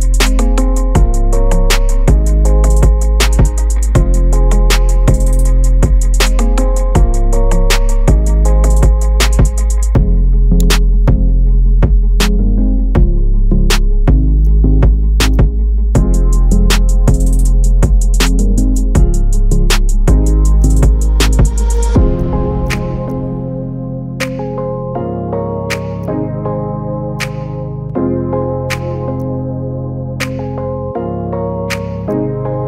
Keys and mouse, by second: 0.0 shift+middle click, 0.7 middle click, 3.5 KP_3, 4.7 g, 11.1 click, 11.4-13.0 middle drag, 13.3 middle click, 13.6 shift+middle click, 15.1 shift+click, 15.8 KP_Decimal, 16.0 click, 16.3 middle click, 16.8 KP_1, 17.0 g, 18.8 shift+middle click, 19.2 middle click, 20.0 middle click, 20.3 middle click, 20.8 click, 20.9 middle click, 21.2 KP_1, 21.4 g, 23.1 middle click, 23.6 middle click, 23.8 KP_1, 24.0 s, 26.1 g, 27.3 KP_3, 27.6 g, 29.4 KP_Divide, 29.7 middle click, 31.5 shift+middle click, 31.8 shift+middle click, 32.0 click.